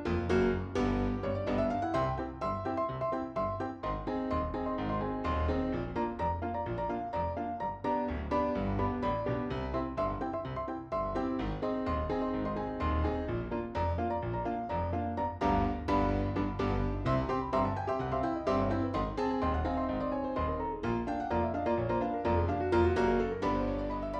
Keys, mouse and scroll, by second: 0.0 KP_3, 0.5-0.9 scroll up 1, 0.9 scroll down 2, 1.1 click, 1.4-2.5 middle drag, 3.1-3.5 scroll down 3, 4.1 click, 5.0-8.9 middle drag, 8.9 click, 11.7-20.1 drag, 20.3 click, 20.7 scroll down 3, 20.9-21.8 middle drag, 21.8-22.4 scroll up 3, 22.4 click.